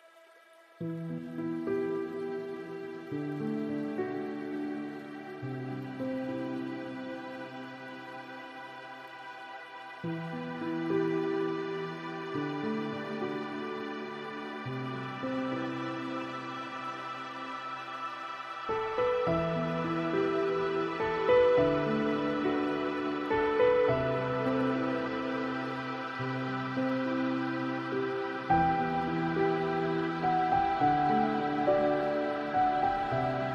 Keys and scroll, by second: 14.9 ctrl+z.